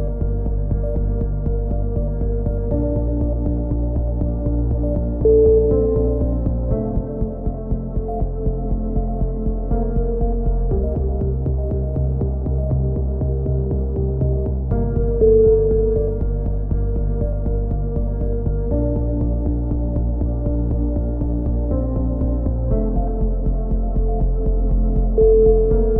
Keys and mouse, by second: 2.2 a, 2.4-3.6 right drag, 3.6 click, 7.7 a, 8.1-11.0 middle drag, 12.4 right click, 13.0 middle click, 13.3 click, 14.4 a, 14.7-16.3 middle drag, 18.3 middle click, 18.7 click, 19.2 middle click, 21.1 ctrl+r, 23.1 click, 23.7 middle click, 23.8 click, 24.1 middle click, 24.6 right click.